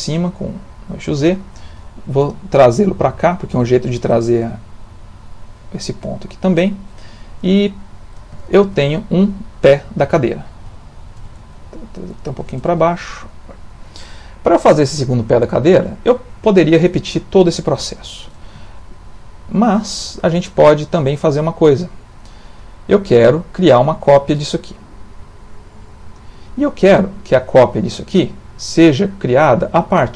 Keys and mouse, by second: 0.8 click, 2.2 g, 4.6 middle click, 7.6 ctrl+middle click, 8.5 shift+middle click, 9.3 ctrl+middle click, 10.7 g, 12.8 middle click, 18.7 shift+middle click, 21.9 middle click.